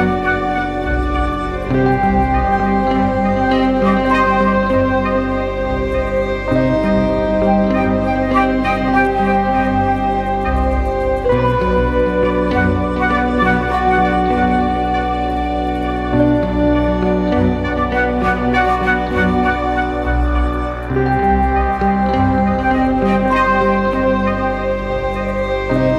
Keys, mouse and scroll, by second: 2.1 Return, 2.8 ctrl+h, 3.4 ctrl+t, 5.0 alt+shift+click, 7.7 Return, 8.8 ctrl+h, 9.3 ctrl+t, 10.6 alt+shift+click, 14.1 Return, 15.1 ctrl+h, 25.8-25.9 drag.